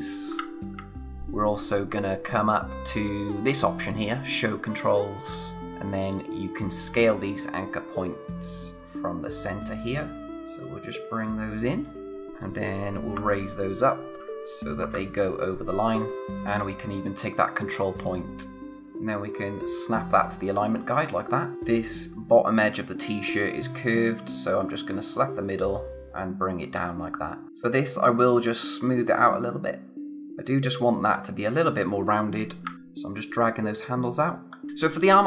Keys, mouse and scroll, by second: 8.0 click, 13.1 Up, 16.1 click, 16.2-16.5 scroll up 1, 16.5 click, 20.5-21.2 scroll down 1, 21.5 space, 21.6-23.5 scroll down 1, 26.6-27.4 scroll down 1, 27.4 space, 27.5 alt+click, 32.6 Down, 34.4-35.2 scroll down 1.